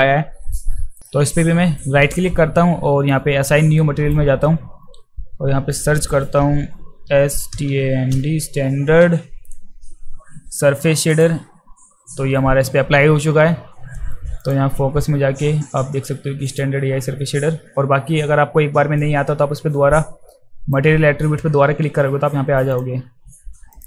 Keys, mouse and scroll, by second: 1.0 right click, 1.8-4.1 right drag, 5.7 click, 6.8-8.2 typing, 11.1 click, 14.4 click, 16.5 click, 19.0-20.7 right drag, 23.7 click.